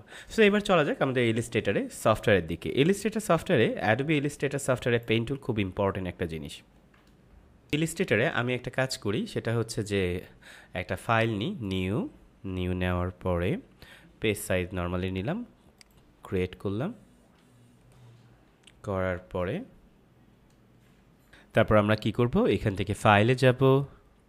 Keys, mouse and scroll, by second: 3.5 click, 7.5 ctrl+Num_Lock, 7.6 ctrl+m, 11.1 click, 15.7 click, 18.5 ctrl+Num_Lock, 18.7 ctrl+-, 21.3 ctrl+m, 22.9 click.